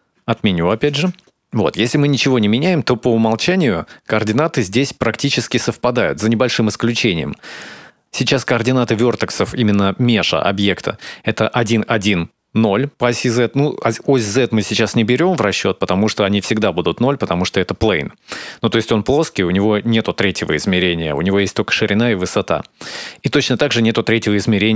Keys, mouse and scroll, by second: 0.0 scroll up 1, 0.1 ctrl+z, 0.4 ctrl+z, 1.1-2.1 scroll up 1, 2.1 right click.